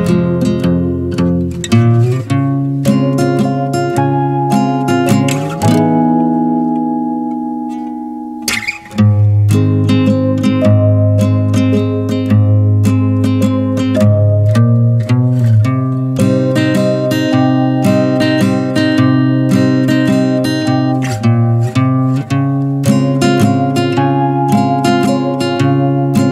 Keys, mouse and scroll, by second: 2.6-5.4 middle drag, 5.5 click, 5.9-8.8 middle drag, 9.1-11.8 middle drag, 11.8 ctrl+space, 12.4 middle click, 12.5 scroll up 2, 12.9 shift+middle click, 13.6 e, 14.9 alt+s, 16.6-17.7 middle drag, 17.7 click, 18.1-18.7 shift+middle drag, 18.7 click, 19.1 middle click, 19.5 shift+click, 20.1 shift+click, 20.5 shift+click, 20.8-24.2 middle drag, 24.2 n, 25.4 click, 25.8-26.3 drag.